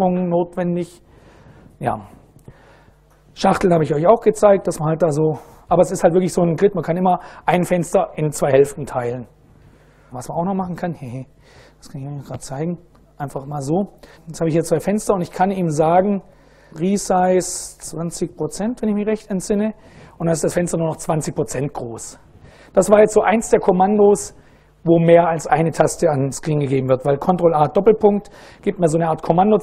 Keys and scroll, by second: 10.6 super+Right, 11.6 ctrl+a, 12.1 s, 13.1 ctrl+a, 13.6 Tab, 14.2 a, 15.0 ctrl+a, 16.0-18.4 typing, 19.1 Return, 26.9 ctrl+a, 27.7 shift+;.